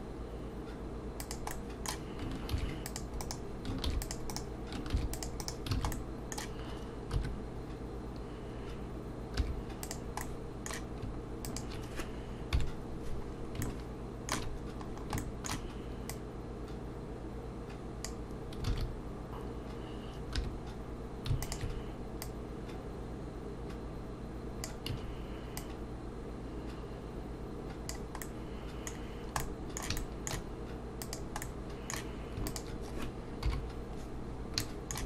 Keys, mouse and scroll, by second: 1.5 middle click, 2.5 ctrl+r, 5.8 alt+a, 5.9 middle click, 7.1 2, 9.4 3, 9.8 click, 10.2 middle click, 11.4 shift+click, 12.5 KP_7, 13.4 scroll up 3, 13.6 shift+middle click, 14.9 scroll up 3, 15.2 shift+middle click, 16.1 click, 18.7 alt+a, 20.3 2, 21.4 alt+shift+click, 22.2 click, 24.9 a, 25.6 click, 28.2 middle click, 29.0-29.4 scroll down 4, 29.4 scroll up 1, 29.4 middle click, 30.0 shift+middle click, 31.0 click, 31.4 middle click, 32.5 shift+click, 33.4 KP_7, 34.3 scroll up 3, 34.6 shift+middle click.